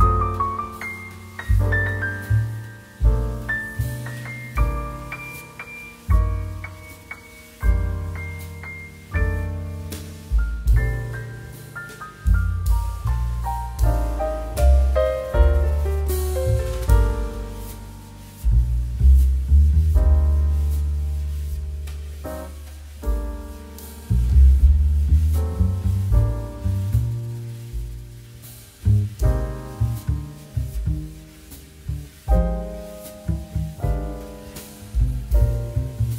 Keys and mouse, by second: 1.0 r, 3.4 click, 7.6 right click, 8.3 click, 13.5 right click, 14.5 click, 15.0 Escape, 15.4 right click, 15.8 click, 17.9 click, 19.5 middle click, 20.2 shift+middle click, 20.5 click, 20.7 middle click, 20.9 shift+middle click, 21.3 middle click, 21.5 shift+middle click, 22.5 shift+middle click, 23.3 z, 26.2 click, 28.3 middle click, 28.8 shift+middle click, 29.1 shift+middle click, 29.5 click, 31.8 shift+middle click, 32.1 click, 34.6 shift+a, 35.0 click.